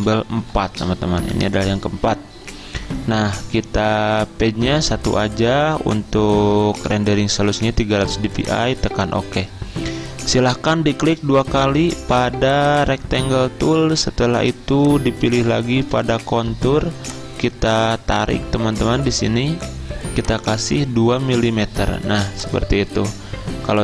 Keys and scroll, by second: 0.0-1.4 typing, 21.4 2.